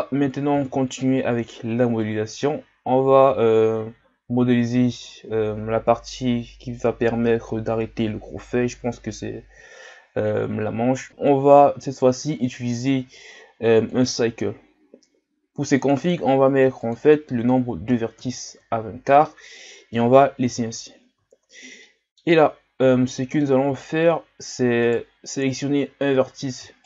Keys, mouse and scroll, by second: 0.5 shift+a, 15.8-19.5 drag, 19.5-20.0 middle drag, 20.0-20.4 scroll up 2, 20.4 Tab, 20.9-21.3 scroll down 3, 21.8 middle click, 22.7-23.1 ctrl+scroll up 1, 23.1 middle click, 23.8 shift+scroll down 2, 24.9-26.8 right drag.